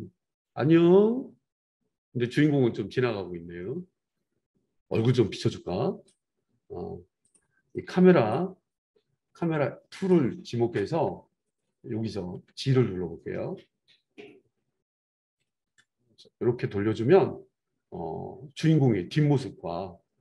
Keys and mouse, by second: 2.7-4.6 right drag, 4.6-7.3 drag, 7.3-7.7 middle drag, 7.7-10.1 drag, 10.1-20.2 middle drag, 12.3 g, 15.6 r.